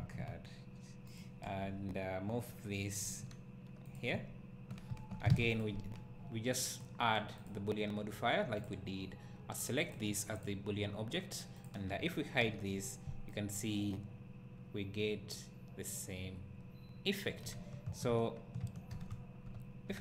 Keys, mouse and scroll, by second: 0.5 ctrl+z, 1.2 click, 1.5 KP_7, 3.1 g, 3.9 click, 5.3 alt+a, 5.6 click, 8.7-10.0 drag, 12.4 h, 13.3-20.0 right drag, 18.9 alt+h.